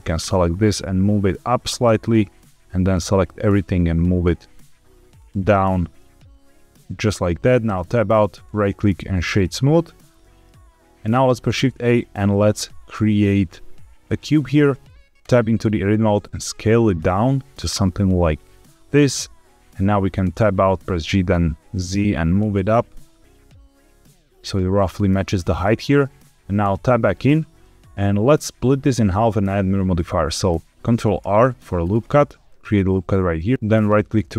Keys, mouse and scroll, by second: 0.2 middle click, 0.5 g, 0.7 z, 1.9 click, 2.4 click, 3.1 g, 3.1 z, 5.1 click, 5.4 middle click, 7.6 Tab, 8.3-9.3 right drag, 10.1 middle click, 11.4 shift+a, 15.1 Tab, 16.1 s, 17.5 click, 17.8-19.0 middle drag, 20.2 Tab, 20.5 g, 20.7 z, 24.7 click, 25.5-25.9 middle drag, 26.6 Tab, 27.5-28.9 middle drag, 31.1 ctrl+r, 33.4 right click, 33.5 ctrl+z, 33.5 ctrl+r.